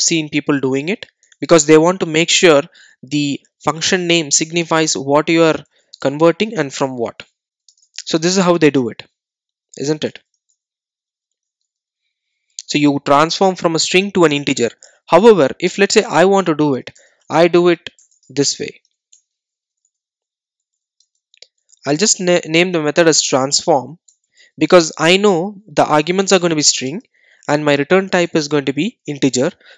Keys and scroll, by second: 10.5 Return, 19.2 Return.